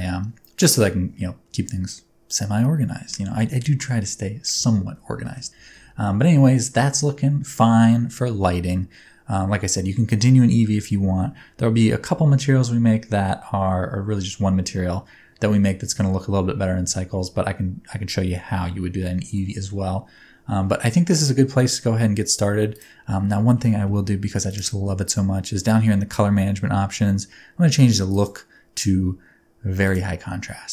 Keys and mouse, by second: 5.2 shift+middle click, 19.4-19.7 middle drag, 24.5 click, 28.2-30.0 drag.